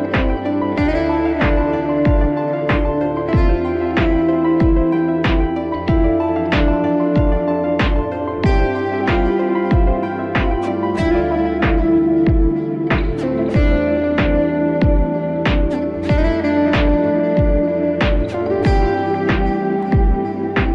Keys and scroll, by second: 18.5 ctrl+z.